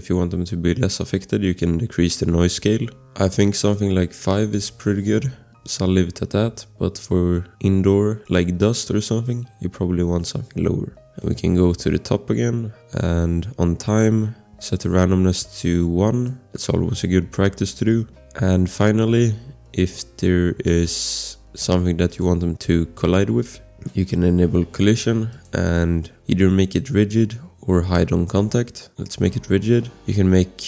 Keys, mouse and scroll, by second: 3.6 click, 4.3 5, 4.5 Return, 15.5 click, 18.0 scroll, 22.1 click, 25.3 click, 28.5 click, 29.6 scroll.